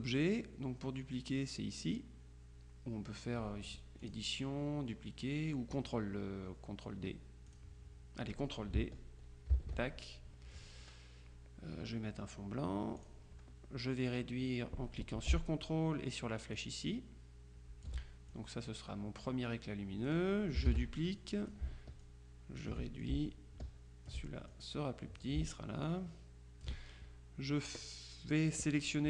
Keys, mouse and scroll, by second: 4.1 click, 7.6 click, 9.6 ctrl+d, 13.1 click, 16.6-18.4 ctrl+drag, 20.7 ctrl+d, 21.2 ctrl+click, 25.9 ctrl+click.